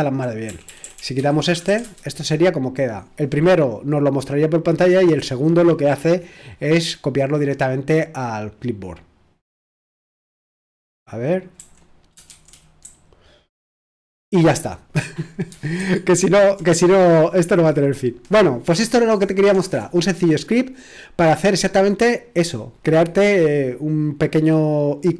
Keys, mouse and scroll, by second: 0.0-1.4 typing, 1.8 ctrl+c, 11.6-14.0 typing, 15.8 super+1.